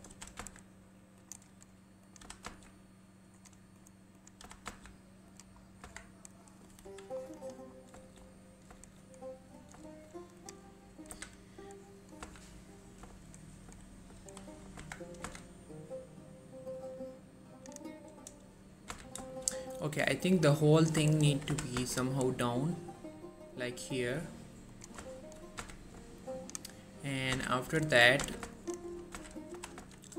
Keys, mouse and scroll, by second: 0.0-0.5 typing, 1.3 click, 1.6-2.2 scroll up 1, 2.2 click, 2.3 g, 2.6 z, 3.5 click, 4.6 g, 4.8 z, 5.4 click, 5.7 scroll down 1, 6.0 Tab, 6.3 scroll down 1, 6.6 middle click, 7.0 1, 7.3-8.1 scroll up 2, 7.5 click, 8.2 shift+middle click, 8.4-8.8 scroll up 1, 10.1 shift+middle click, 10.3 scroll up 1, 10.5 click, 11.2 z, 12.3 z, 12.9-14.3 scroll down 1, 14.3 3, 14.9 Tab, 15.4 z, 16.8-18.1 drag, 18.6-19.1 scroll up 1, 19.1 z, 19.4 shift+middle click, 19.6 shift+scroll up 1, 20.9 click, 21.3 shift+middle click, 21.6 typing, 22.1 scroll up 1, 25.1 shift+Num_Lock, 25.1 shift+scroll down 1, 25.3 shift+middle click, 25.7 z, 26.3 ctrl+click, 27.5-29.8 typing, 28.1 right click, 28.7 ctrl+click.